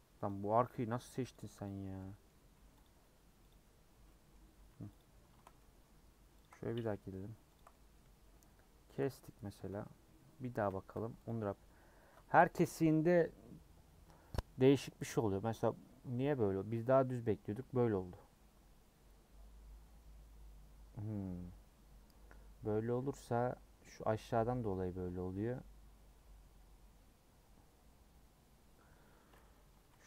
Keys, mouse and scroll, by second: 0.2 click, 1.3 click, 1.6 click, 2.0 middle click, 2.8 click, 3.0 Tab, 3.5 click, 3.9 Tab, 4.1 middle click, 5.0 click, 5.6 middle click, 6.4 ctrl+click, 6.6 middle click, 7.5 ctrl+click, 7.7-8.9 middle drag, 8.9 ctrl+click, 9.5 a, 11.3 u, 22.7-29.9 middle drag, 29.9 ctrl+z.